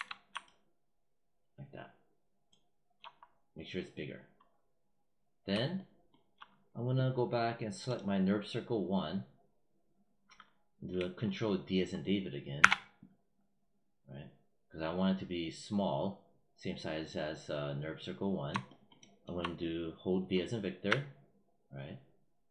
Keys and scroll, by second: 12.4 ctrl+d, 20.7 v.